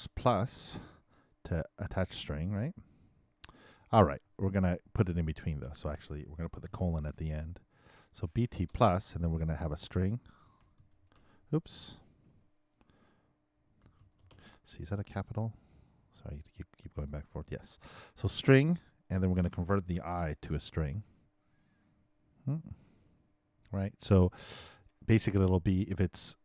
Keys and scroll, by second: 0.0 shift+=, 0.2 shift+space, 6.6 shift+BackSpace, 8.7 shift+space, 10.2-11.6 typing, 20.8-24.0 typing.